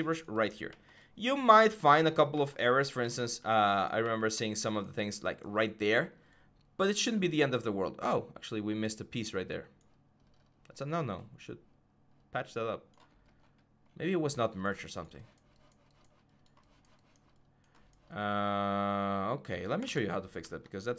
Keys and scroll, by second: 19.6 alt+Tab, 20.3 alt+Tab.